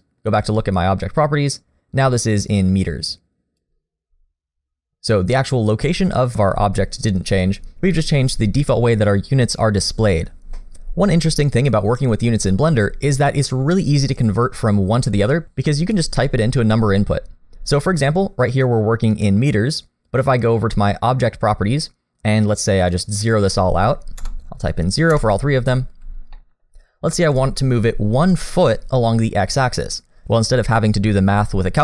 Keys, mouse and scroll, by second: 0.4 click, 2.1 click, 4.9 click, 20.3 click, 22.9 click, 26.3 middle click, 26.8 scroll up 1, 27.1 shift+middle click, 27.5-29.0 scroll up 1.